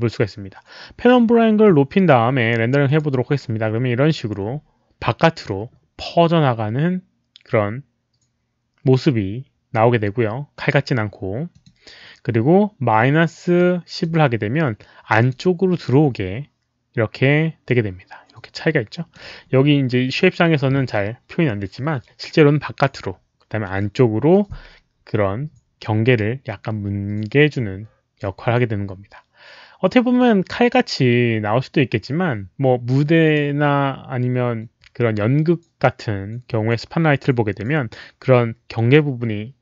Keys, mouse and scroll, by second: 2.8 click, 11.4 click, 13.5 click, 15.1 click, 17.6-19.1 drag, 22.3 click, 30.6-33.3 drag.